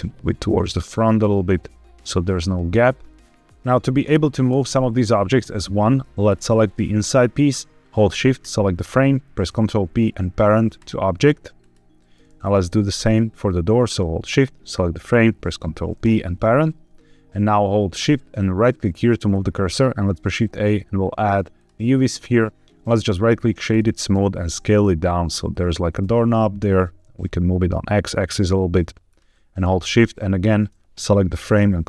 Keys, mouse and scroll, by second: 3.2 middle click, 3.9 click, 4.4 g, 5.1 Escape, 6.1 click, 8.2 shift+click, 9.4 ctrl+p, 12.3 click, 13.7 shift+click, 15.0 ctrl+p, 18.5 shift+right click, 19.8 shift+a, 22.4 click, 22.8-23.7 right drag, 24.0 s, 25.4 click, 25.7 g, 25.9 x, 29.0 shift+drag, 29.8 shift+click, 31.4 ctrl+p.